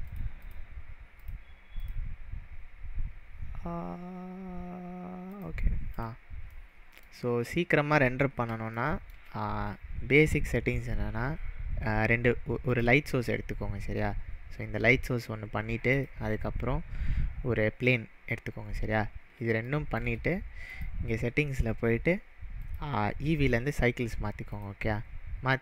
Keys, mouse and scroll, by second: 0.0 click, 0.4 click, 1.2 click, 1.8 click, 3.6-5.2 scroll up 3, 5.3 click, 5.9 click, 6.5-7.0 middle drag, 8.0 scroll down 2, 8.7-9.3 shift+middle drag, 12.7 click, 15.9 click, 18.9 scroll up 3, 19.6-20.2 shift+middle drag, 20.7 click, 22.6-24.6 drag.